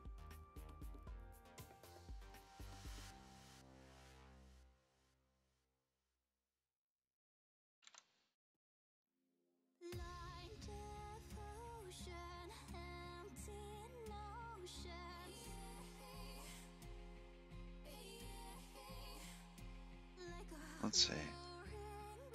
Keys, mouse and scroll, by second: 10.2 click.